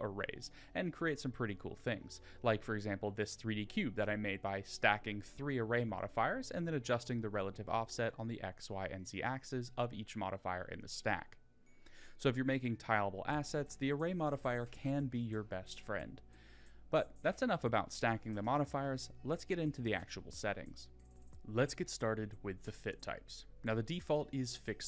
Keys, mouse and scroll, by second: 0.0 click, 1.9-3.4 drag, 3.4 scroll down 5, 3.8-7.3 middle drag, 14.1 click, 15.8-16.8 drag, 20.1-20.6 middle drag, 21.1-23.9 shift+middle drag.